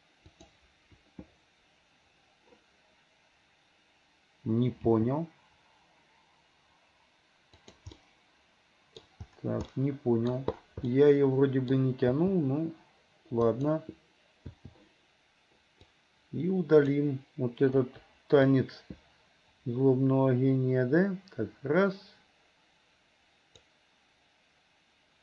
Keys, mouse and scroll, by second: 0.4 click, 4.8 g, 7.9-9.0 middle drag, 9.0 scroll down 1, 9.7 middle click, 10.9-12.2 middle drag, 12.2 g, 14.6 i, 15.9-17.0 drag, 17.9 Delete, 18.6-23.7 drag.